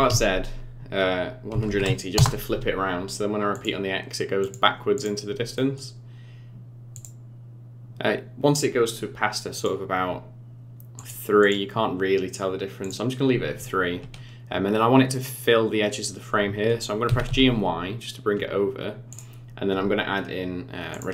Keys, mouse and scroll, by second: 3.5 click, 4.4 click, 4.9 click, 5.5 middle click, 6.9 click, 9.5 click, 10.9 click, 11.4 click, 12.8 click, 13.9-14.4 scroll down 2, 17.0 g, 20.9 click.